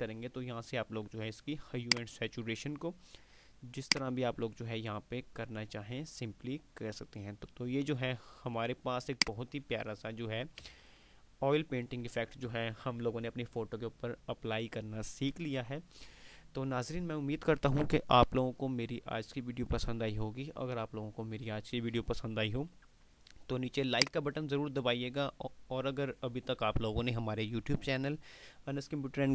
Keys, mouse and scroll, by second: 1.7-3.0 drag, 10.7 ctrl+space, 11.0 ctrl+click, 11.2 ctrl+space, 24.1 click.